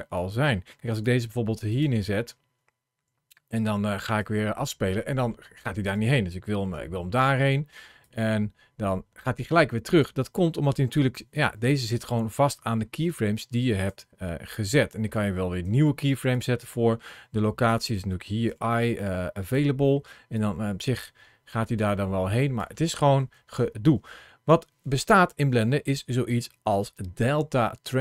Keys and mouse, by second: 0.8 g, 1.5 click, 4.0-5.7 drag, 6.5 g, 6.9 click, 7.8-9.9 drag, 10.8 ctrl+shift+a, 16.8 g, 17.5 click, 18.3 i, 20.2-22.4 drag, 23.0 ctrl+z.